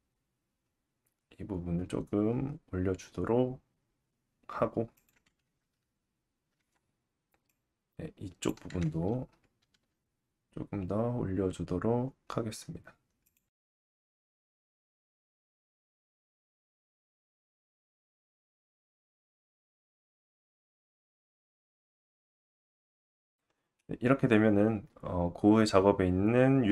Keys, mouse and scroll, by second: 5.0-7.4 right drag, 7.4 click, 9.7 g, 13.6 Tab, 14.7 alt+z, 15.2 click, 16.6 Tab, 18.0 alt+z, 18.4-21.6 drag, 19.8 g, 21.7 click, 22.0 Tab, 22.7 alt+z, 23.8 middle click.